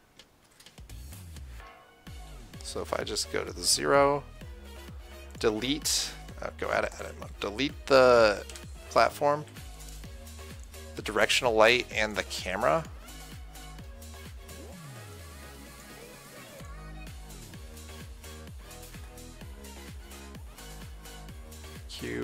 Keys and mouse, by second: 0.0-1.4 drag, 3.1 KP_0, 5.7-9.3 drag, 6.6 Tab, 8.8 Delete, 9.7 Delete, 10.9-18.8 drag, 11.3 Delete, 12.6 Delete.